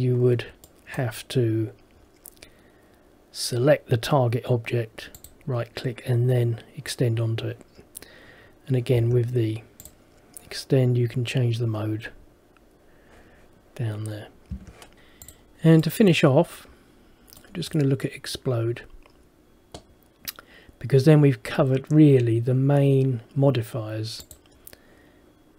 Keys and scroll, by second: 9.1 Escape, 14.6 Escape.